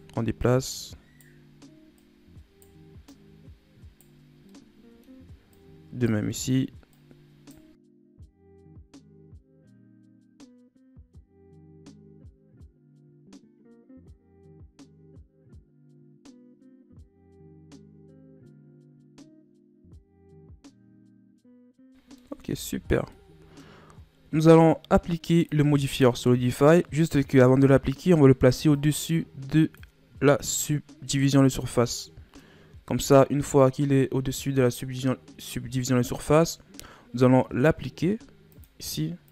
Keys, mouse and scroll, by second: 0.4 right click, 2.0 right click, 3.0 right click, 4.4-5.5 middle drag, 5.5 right click, 6.3 middle click, 6.9 right click, 8.2 right click, 8.7 right click, 9.1 right click, 9.4 middle click, 9.9 right click, 11.3 right click, 11.8 middle click, 12.4-12.8 scroll up 1, 12.8 right click, 13.4 right click, 14.0 right click, 15.0 scroll down 2, 15.1 middle click, 15.5 scroll up 1, 15.7 middle click, 16.1 right click, 16.8 right click, 17.3 right click, 18.1 middle click, 18.9 right click, 19.5 right click, 20.6 right click, 21.2 middle click, 21.9 scroll down 1, 22.1 middle click, 22.4 Tab, 22.9 scroll down 1, 23.1-23.8 middle drag, 23.8 scroll up 1, 25.3-28.4 drag, 28.7-29.7 drag, 30.5-31.4 middle drag, 31.4-31.9 scroll up 2, 31.9-34.9 middle drag, 38.5-39.3 drag.